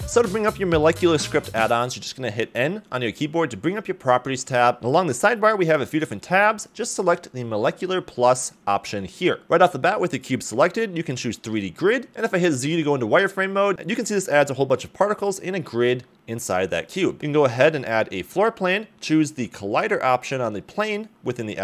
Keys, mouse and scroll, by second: 3.2 n, 5.6 click, 12.4 z, 15.4 ctrl+click, 15.4 g, 15.8 shift+a, 16.9 s, 17.6 click, 20.1 click.